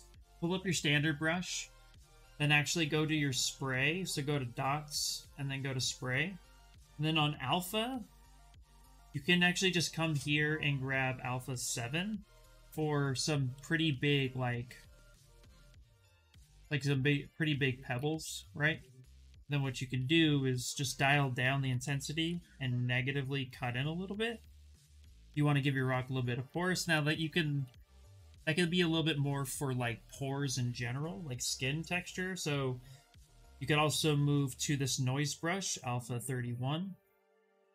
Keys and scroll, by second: 13.2 s, 15.8 s, 16.3 ctrl+z, 18.0 s, 19.7 space, 21.6 s, 25.9 ctrl+z, 26.5 ctrl+z, 26.8 ctrl+z, 27.3 ctrl+z, 27.7 ctrl+z, 27.9 ctrl+z, 28.1 ctrl+z, 37.2 ctrl+z, 37.4 ctrl+z.